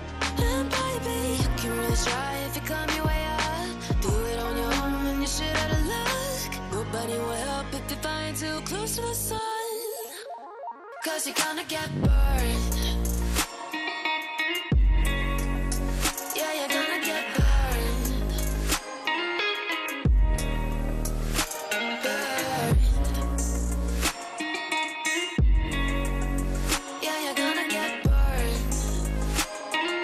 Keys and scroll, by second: 19.8 ctrl+g, 22.9 Escape, 28.3 ctrl+r.